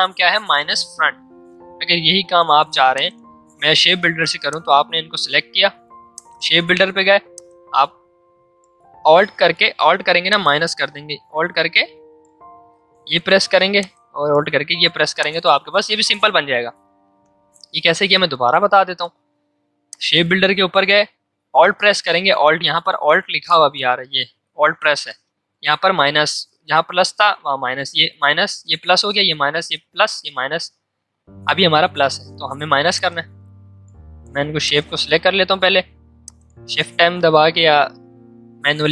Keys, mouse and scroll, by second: 1.8 click, 2.0 ctrl+z, 2.9-10.2 drag, 10.2-14.9 alt+drag, 14.9 v, 15.2 click, 16.7 ctrl+z, 17.7 ctrl+shift+z, 19.8 click, 32.9 alt+click, 34.1 v, 34.6 click.